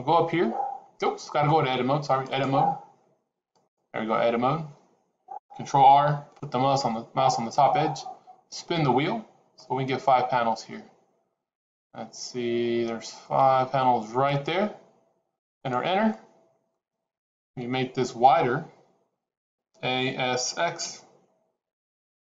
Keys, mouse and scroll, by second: 2.2 click, 5.6 ctrl+r, 16.0 middle click, 17.3 KP_1, 19.4 a, 20.0 s.